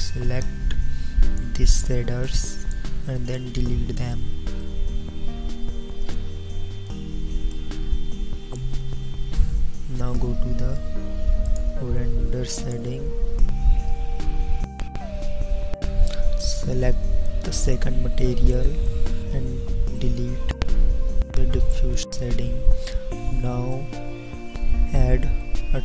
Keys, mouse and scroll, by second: 5.0 b, 5.0 x.